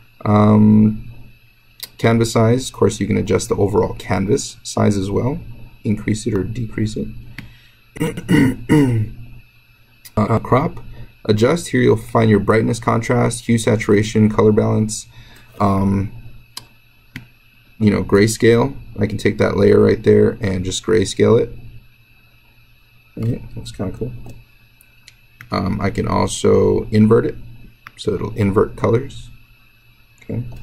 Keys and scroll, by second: 24.0 ctrl+z.